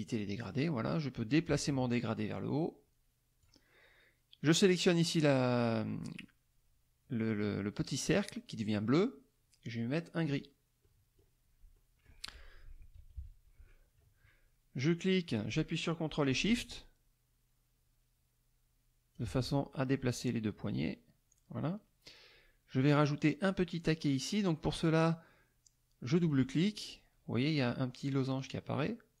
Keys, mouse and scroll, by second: 0.0 click, 1.3-3.6 drag, 4.4 click, 10.2 click, 10.8 middle click, 11.7 middle click, 12.9 KP_Subtract, 14.9-19.3 drag, 24.7 click, 26.0 click, 28.4 click.